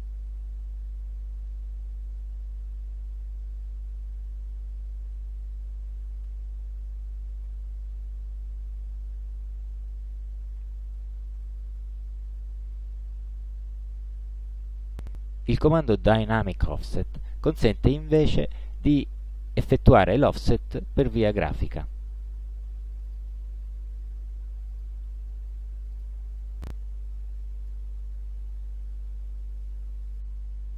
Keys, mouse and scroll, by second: 2.3 ctrl+shift+8, 3.7 ctrl+shift+8, 5.1 ctrl+shift+9, 6.3 ctrl+shift+9, 7.5 ctrl+shift+9, 10.1 ctrl+z, 17.2 click, 21.0 click, 23.1 click, 24.7 click, 26.0 click, 27.7-30.7 drag.